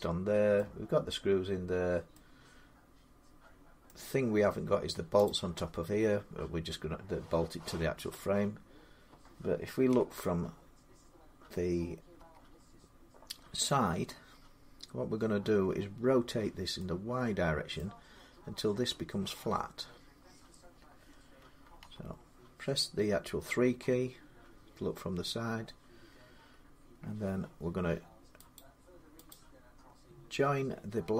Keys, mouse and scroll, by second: 0.4 middle click, 1.9 middle click, 3.7 middle click, 5.1 click, 9.7 1, 12.0 3, 17.6-22.7 middle drag, 21.6 3, 28.4-31.1 drag.